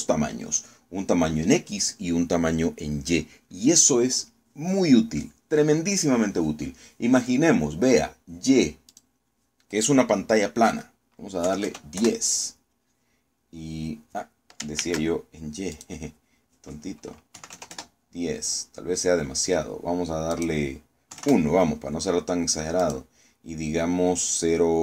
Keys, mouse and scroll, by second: 9.5 click, 12.1 KP_1, 12.3 KP_0, 12.7 KP_Enter, 15.5 ctrl+z, 16.4 click, 18.0 KP_1, 18.2 KP_0, 18.4 KP_Enter, 19.4 scroll down 2, 19.9 scroll up 2, 21.0 click, 21.8 KP_1, 21.9 KP_Enter, 23.5 click.